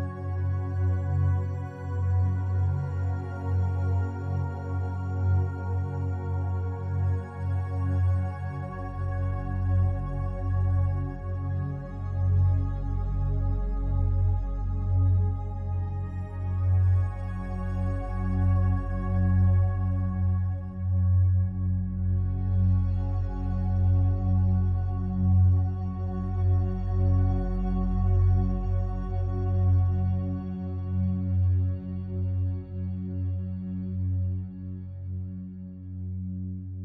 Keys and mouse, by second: 0.2 alt+shift+click, 0.9 alt+click, 1.3 typing, 2.1 ctrl+alt+click, 3.7-5.3 drag, 6.6 f, 7.0 click, 7.9 click, 8.7 click, 9.3 click, 10.5 click, 10.9 click, 11.3 click, 11.6 click, 11.7 typing, 12.4 click, 12.8 click, 13.2 click, 13.5 click, 13.8 click, 14.2 click, 14.5 click, 14.9 click, 15.2 click, 15.8 alt+click, 17.5 alt+click, 19.6-23.0 alt+drag, 23.2 f, 23.4-25.5 drag, 25.9 ctrl+alt+click, 26.5 ctrl+alt+click, 29.3 alt+click, 30.9 click, 31.9 alt+click, 32.5 alt+click, 33.1 ctrl+alt+click, 33.5 ctrl+alt+shift+click, 34.0 alt+shift+click, 34.7 ctrl+alt+click, 35.4 typing, 35.6 ctrl+alt+click, 36.7-36.8 drag.